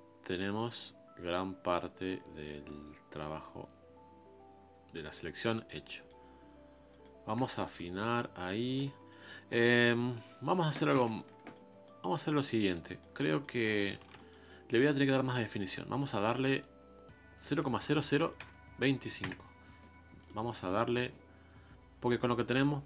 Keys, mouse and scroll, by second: 3.1-5.7 drag, 5.7 scroll down 1, 5.9 middle click, 6.8-7.8 scroll up 2, 6.9 middle click, 7.8 scroll up 1, 7.8-8.9 ctrl+drag, 8.9 scroll down 1, 9.1-11.7 middle drag, 11.7 scroll down 3, 11.8 middle click, 12.2-12.5 scroll up 3, 12.5-13.7 middle drag, 13.7 scroll down 2, 14.0 alt+m, 14.1-19.4 middle drag, 21.7 scroll up 1.